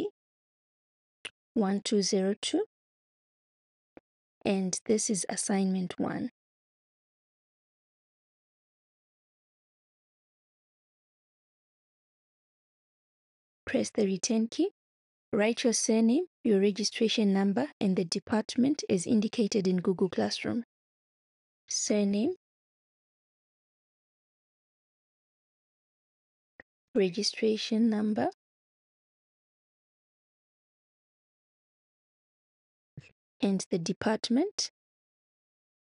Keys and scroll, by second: 0.0-3.6 typing, 6.5-12.6 typing, 14.0 Return, 20.9 shift+s, 22.1-24.3 typing, 25.7-27.2 typing, 28.3 space, 29.4-31.6 typing, 32.7 space.